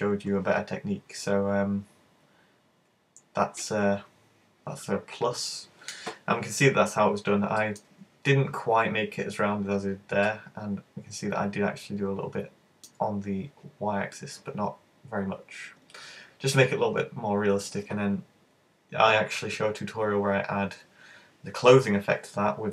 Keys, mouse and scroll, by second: 6.9-7.6 scroll up 1, 7.6 shift+middle click, 10.3 middle click, 14.2 middle click, 15.4 middle click.